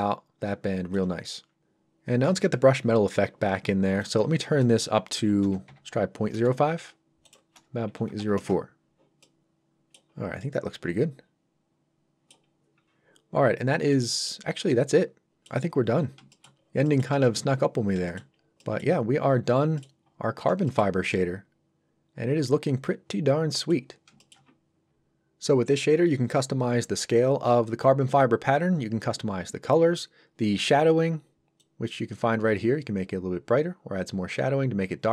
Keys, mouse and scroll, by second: 4.0 click, 5.4 KP_0, 6.3 Return, 7.3 click, 8.0 KP_0, 8.4 Return, 9.2 middle click, 10.1 scroll down 1, 10.4 middle click, 12.5-12.8 scroll up 1, 13.5 scroll down 1, 13.9 middle click, 14.4 scroll down 1, 14.7 middle click, 15.8 scroll down 1, 16.3 shift+middle click, 16.9 middle click, 17.2 shift+middle click, 17.8 scroll down 1, 18.1 shift+middle click, 18.3 scroll up 1, 18.6 middle click, 18.9 scroll up 1, 19.7 middle click, 20.1 scroll up 1, 20.6 shift+middle click, 21.1 middle click, 21.2 middle click, 24.2 shift+middle click, 31.1 scroll up 1, 31.6 click.